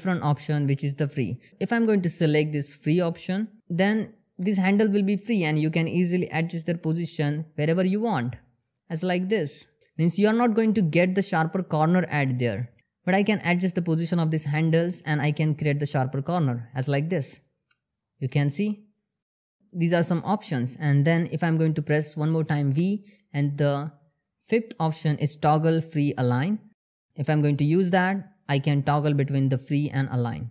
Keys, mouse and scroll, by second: 3.2 click, 4.9 click, 7.2 g, 8.6 click, 10.6 click, 11.6 ctrl+z, 12.8 click, 14.2 g, 15.0 click, 17.0 g, 18.0 click, 19.0 g, 19.2 click, 22.2 v, 26.7 click.